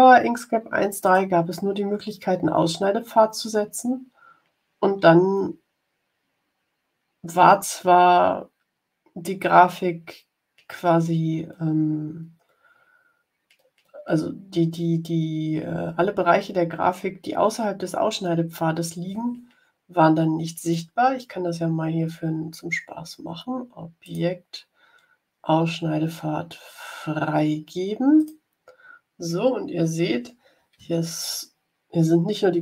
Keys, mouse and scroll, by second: 0.9 click, 24.0 click, 28.1 click, 29.3-29.8 scroll down 2.